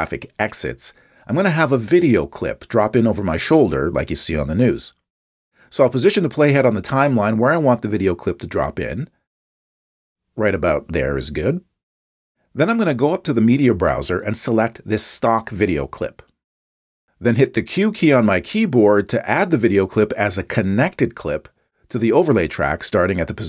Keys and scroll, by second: 19.0 p.